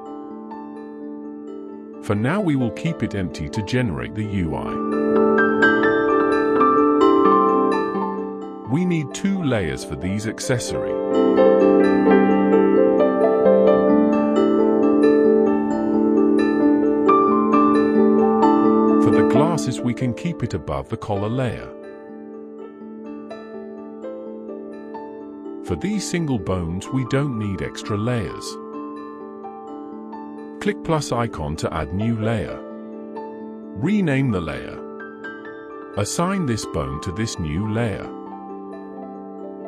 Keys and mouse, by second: 3.0-3.4 middle drag, 5.9 middle click, 7.1 click, 7.5 middle click, 8.3 shift+click, 8.7 shift+click, 9.5 middle click, 10.5 shift+click, 11.0 middle click, 11.9 shift+click, 12.4-15.3 middle drag, 16.3-17.1 middle drag, 17.6 shift+middle drag, 18.5-19.2 middle drag, 19.6 click, 21.2 click, 29.2 click, 30.0 click, 31.2 click, 31.9 click, 32.1-35.5 drag, 34.1 s, 37.5 click, 38.3 click, 39.2 click.